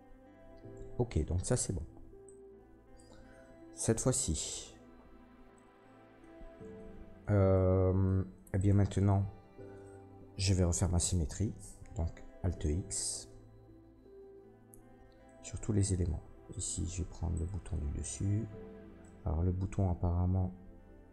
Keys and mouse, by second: 7.5 Tab, 8.6 middle click, 8.7-21.1 drag, 11.2 Tab, 12.5 alt+x, 16.7 Tab, 17.3 middle click, 17.3 right click.